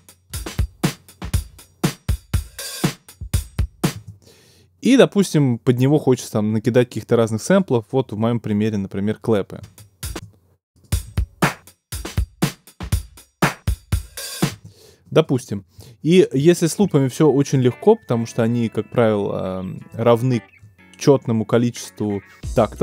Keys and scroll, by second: 3.9 space, 9.6 space, 14.5 space.